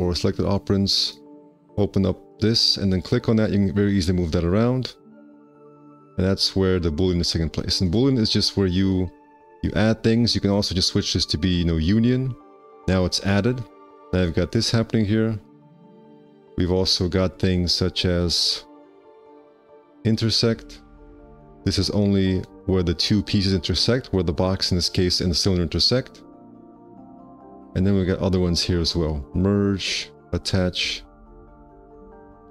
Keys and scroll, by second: 13.5 1.